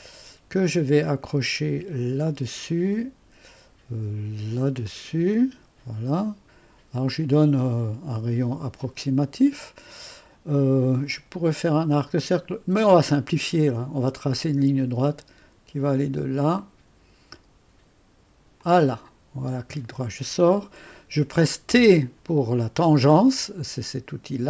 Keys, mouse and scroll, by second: 0.0 click, 2.3 click, 4.9 click, 8.8 click, 9.2 click, 14.2 click, 16.6 click, 18.6 click, 19.4 click, 19.6 right click.